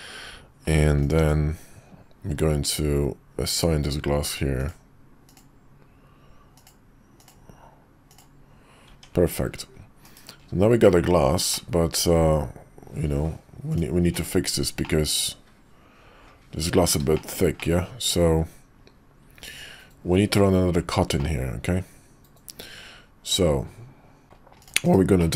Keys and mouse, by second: 0.9 click, 1.1 Tab, 3.4 click, 4.5 click, 5.3-6.6 drag, 8.8 Tab, 9.9 /, 10.8 KP_5, 11.4-13.2 middle drag, 14.0 /, 14.8-16.8 middle drag, 17.1 shift+middle drag, 17.5-20.4 middle drag, 21.1-23.3 middle drag, 24.2 middle click, 24.5 click, 24.8 /, 25.1 middle click.